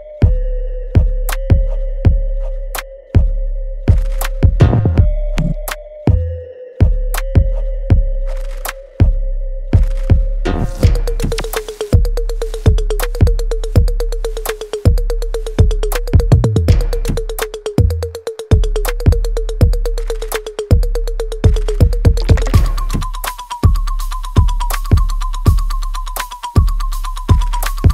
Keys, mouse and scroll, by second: 0.5 alt+middle click, 0.9 alt+right click, 2.0 shift+click, 2.9 ctrl+z, 3.6 shift+click, 4.3 ctrl+z, 4.7 alt+right click, 5.0 alt+click, 5.4 alt+middle click, 5.8 alt+right click, 6.6 shift+click, 8.0 alt+right click, 8.4-10.0 alt+drag, 10.0 click, 13.6 right click, 14.2-15.7 alt+drag, 15.7 alt+right click, 16.1 alt+middle click, 16.4 alt+right click, 17.8-19.3 drag, 19.3-22.0 ctrl+drag, 22.0 right click, 22.6 alt+middle click, 23.3 alt+space, 23.9-24.9 scroll down 1, 24.9 click, 25.2-25.7 scroll down 1, 25.7 click, 26.7 ctrl+s, 27.2 alt+click, 27.6 alt+right click.